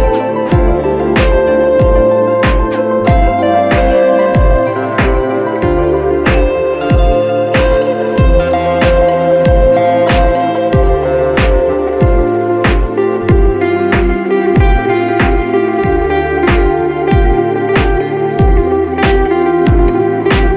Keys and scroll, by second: 4.9 Return, 8.6 Return, 11.4 ctrl+alt+shift+e, 13.9 space.